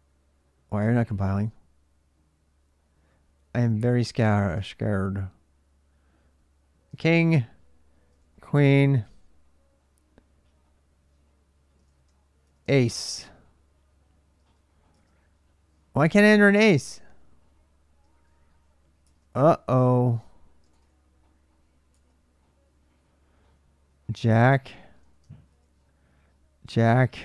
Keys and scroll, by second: 3.5-4.3 typing, 4.7 Return, 6.7-8.7 typing, 6.9 Return, 11.6-14.7 typing, 17.9-18.8 typing, 20.5 typing, 21.7 typing, 24.9-25.2 typing.